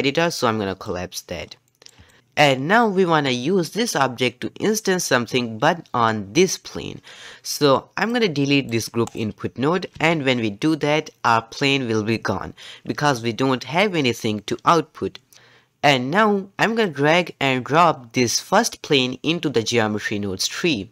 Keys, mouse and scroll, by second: 1.4 scroll down 2, 1.7 middle click, 2.2-6.4 scroll down 1, 9.9 x, 17.0 click.